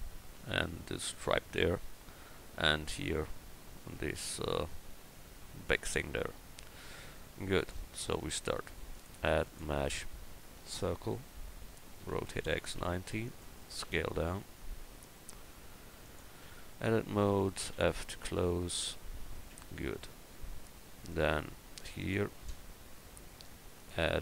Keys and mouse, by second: 8.0 click, 12.0 r, 13.7 s, 16.4 Tab, 17.7 f, 19.5 Tab.